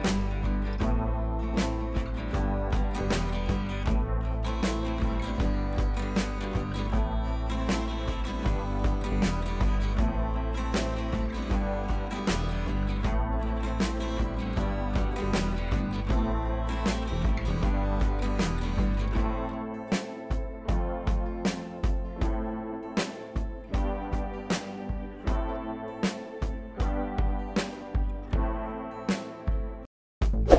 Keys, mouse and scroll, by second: 14.2 click, 16.1-19.1 drag.